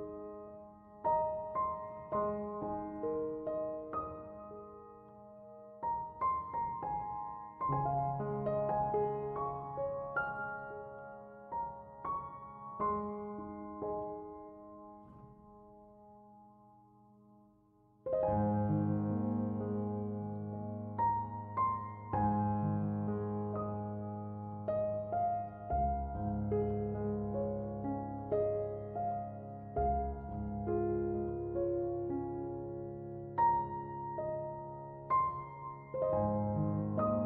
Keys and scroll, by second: 21.6-23.1 typing.